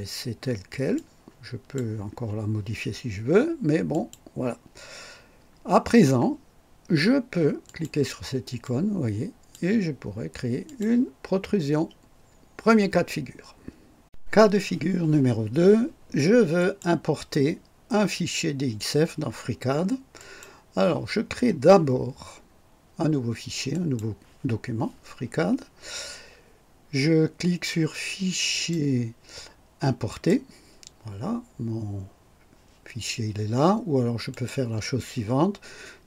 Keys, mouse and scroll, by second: 0.9-1.9 drag, 3.9 click, 7.6 click, 8.6-9.7 drag, 10.6 click, 16.5 click, 20.1 click, 23.7 click, 28.5 click, 30.0 click, 34.3 click.